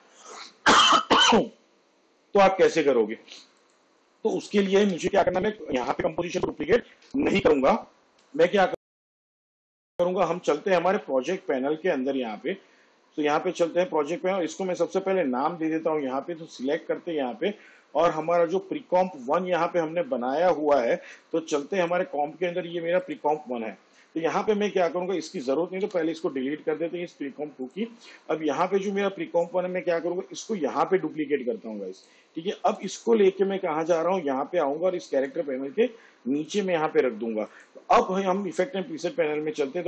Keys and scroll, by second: 5.0 ctrl+z, 26.0 Delete, 30.8 ctrl+d.